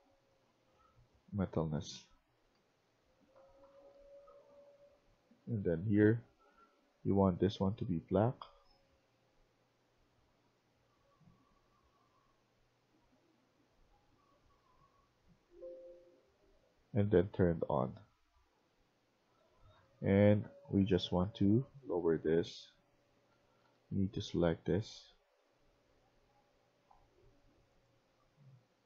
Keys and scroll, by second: 2.0-7.0 typing, 19.4-19.7 typing, 20.1 Escape, 20.3 Escape, 22.8-24.1 typing, 28.4 q.